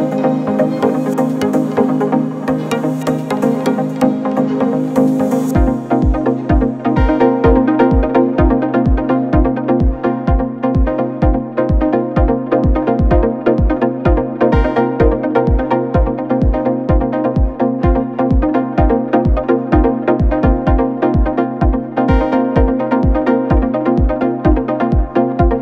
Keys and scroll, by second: 0.3 space, 1.6 space, 4.3 ctrl+z, 7.4 ctrl+-, 14.0 ctrl+=, 14.5 space, 14.7 ctrl+=, 18.1 space, 20.2 space, 21.5 ctrl+z, 22.4 space.